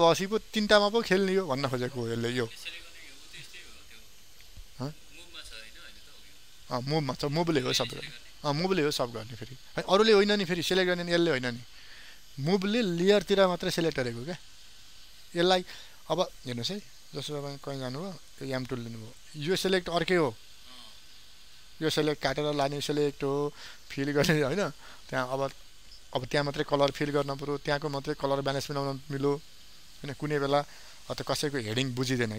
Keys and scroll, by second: 24.3 ctrl+alt+z, 31.4 ctrl+d.